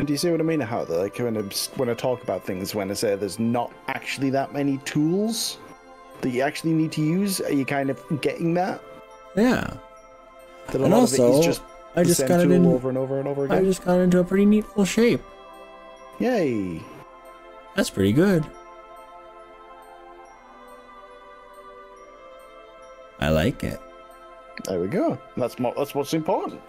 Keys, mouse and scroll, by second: 1.1 scroll down 2, 1.7-2.1 scroll up 2, 6.5 click, 14.3-20.9 middle drag, 20.9 click, 21.0-26.5 middle drag, 26.5 drag.